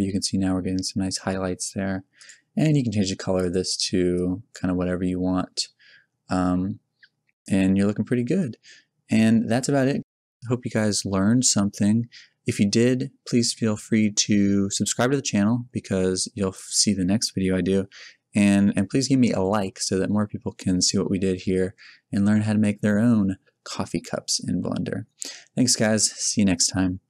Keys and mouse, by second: 6.8-8.0 middle drag, 8.4-11.7 middle drag, 24.0 middle click, 25.3 middle click, 26.1 middle click.